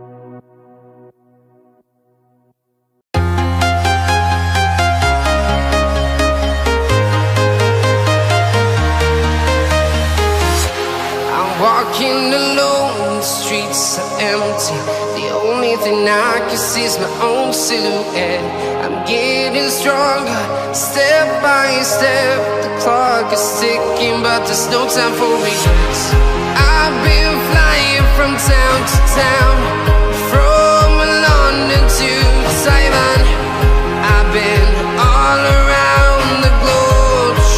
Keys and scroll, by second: 1.0 ctrl+space.